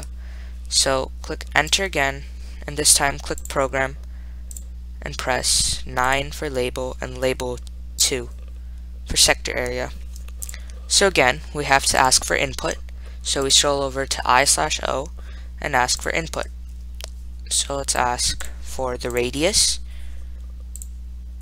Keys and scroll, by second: 2.0 Return, 6.4 9, 8.4 2, 10.7 Return, 13.7 Right, 16.3 1, 21.1 *.